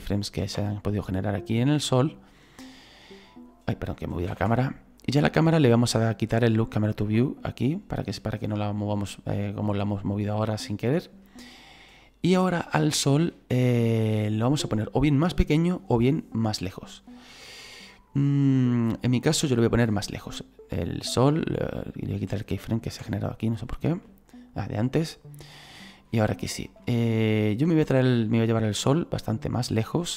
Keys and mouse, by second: 0.2 right click, 0.5 Delete, 0.9 click, 2.6 middle click, 4.3 ctrl+z, 7.2 click, 8.9 right click, 9.7 click, 18.9 right click, 21.6 right click, 23.0 Delete, 23.3 click, 24.3 right click, 25.6 middle click, 27.8 shift+middle click, 29.2 click.